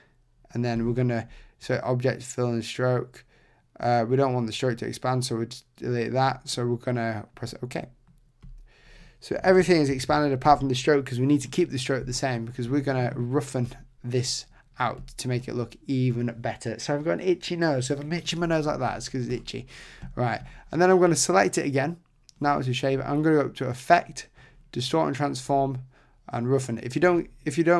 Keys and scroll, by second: 9.9 super+=.